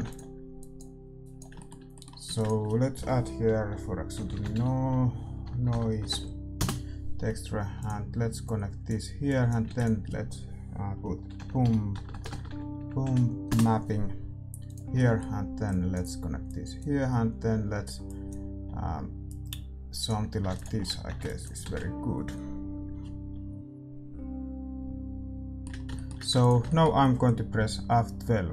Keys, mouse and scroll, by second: 15.8-20.6 middle drag, 20.7 ctrl+s, 21.2 ctrl+b, 21.2-23.5 middle drag, 23.5 shift+z, 25.6 ctrl+s, 25.6-28.5 middle drag, 26.7 ctrl+s.